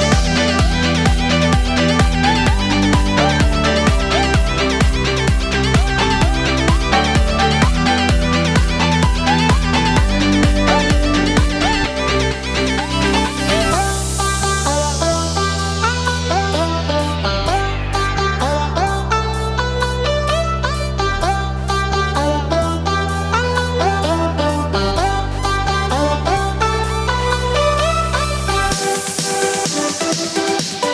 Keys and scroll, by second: 20.9 ctrl+j.